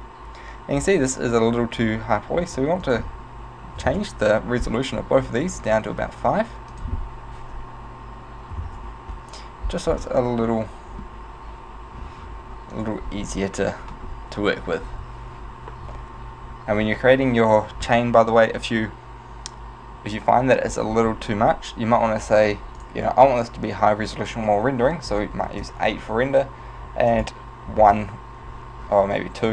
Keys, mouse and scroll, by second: 0.8 z, 2.9 click, 5.4 right click, 5.7 right click, 6.8 click, 10.5 middle click, 11.2 z, 22.3 click, 22.8 click, 27.2 click.